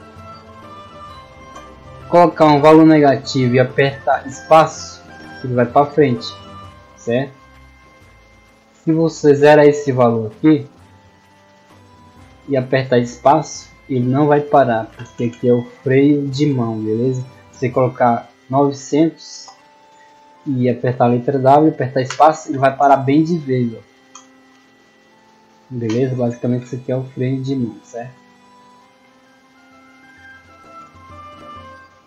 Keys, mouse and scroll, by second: 2.8-5.3 typing, 9.0 click, 10.5-12.3 typing, 14.1-15.1 typing, 19.4-20.2 typing, 22.9 w, 24.1 space, 25.8 space, 28.7-29.3 scroll down 2, 29.3-30.4 scroll down 2, 30.4 scroll down 2, 31.5-32.0 middle drag.